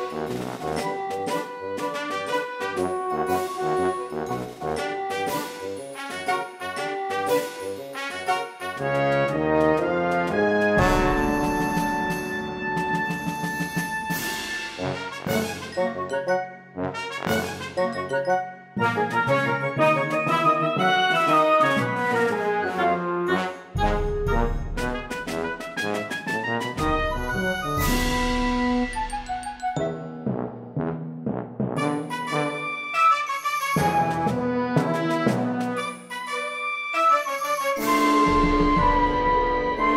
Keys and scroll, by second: 22.8 e, 24.6 space, 25.2 p, 26.8 space, 31.8 space, 32.5 ctrl+z, 32.8 ctrl+z, 34.6 space, 39.4 space, 39.8 space.